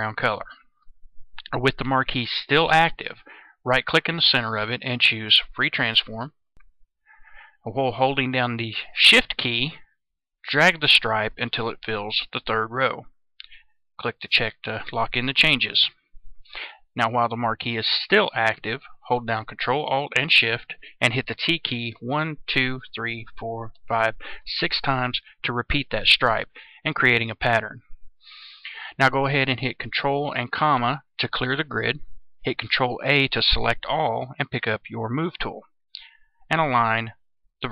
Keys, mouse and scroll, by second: 3.7 right click, 5.6 click, 9.4-12.2 shift+drag, 14.2 click, 21.8 ctrl+alt+shift+t, 22.2 ctrl+alt+shift+t, 22.7 ctrl+alt+shift+t, 23.2 ctrl+alt+shift+t, 23.6 ctrl+alt+shift+t, 32.9 ctrl+a, 34.6 click.